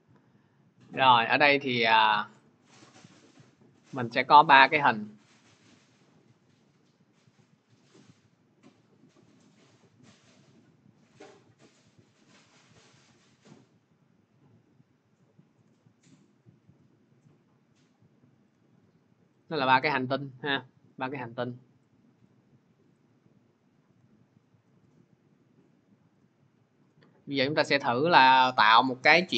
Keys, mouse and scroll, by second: 0.1 click, 2.2 click, 4.8 shift+click, 5.6 click, 8.2 click, 10.8 click, 16.5 shift+click, 17.3 click, 19.3 shift+click, 20.4 click, 21.7 click, 24.5 shift+click, 25.3 click, 26.6 shift+click, 28.0 click.